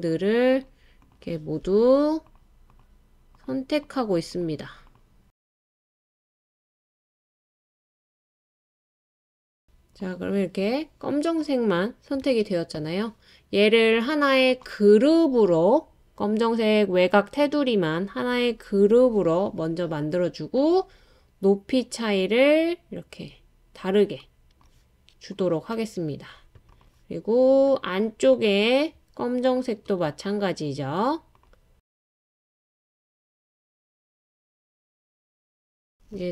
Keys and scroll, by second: 12.3 super+z.